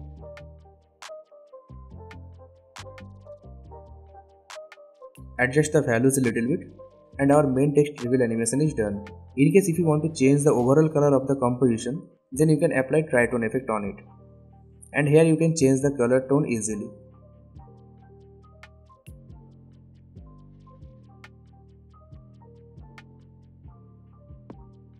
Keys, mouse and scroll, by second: 1.3-2.5 typing, 3.5-8.2 drag, 5.5-7.2 drag, 8.4-10.1 drag, 11.5-12.6 typing, 13.7-16.6 drag, 24.2 space.